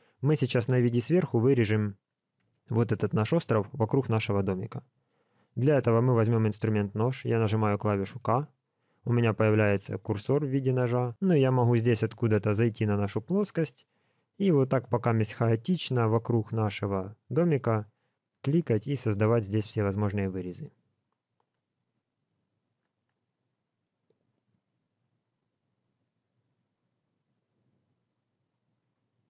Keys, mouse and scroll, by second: 2.0-2.6 scroll down 1, 2.6 shift+middle click, 5.0 shift+middle click.